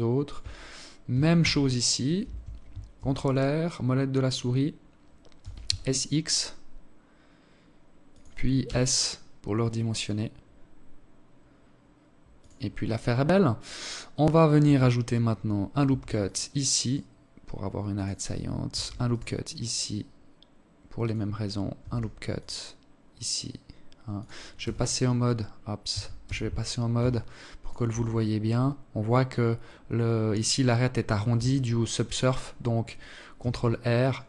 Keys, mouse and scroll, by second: 0.1 r, 1.6 ctrl+r, 4.1 s, 7.4 s, 12.4-14.0 scroll up 1, 14.6 ctrl+r, 17.4 ctrl+r, 20.5 ctrl+r, 23.3 t, 24.6 t, 24.9 z, 25.8 alt+shift+click, 32.1 ctrl+r.